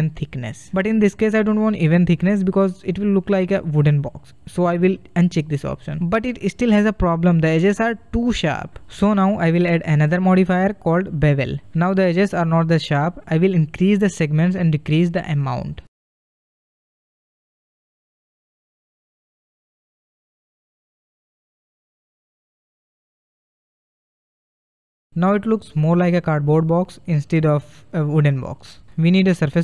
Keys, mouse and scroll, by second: 3.4-12.4 drag, 12.9 scroll up 1, 13.1-14.4 middle drag, 14.4-19.4 drag, 24.1-26.4 middle drag, 26.4 scroll down 2, 26.8 middle click, 27.4 scroll down 1, 27.7-29.6 middle drag.